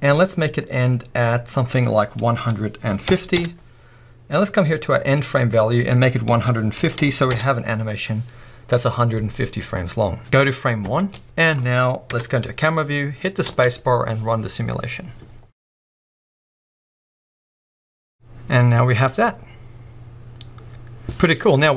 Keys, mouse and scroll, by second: 3.4 Return, 7.4 Return, 10.8 shift+Left, 11.2 middle click, 12.1 KP_0, 13.5 space.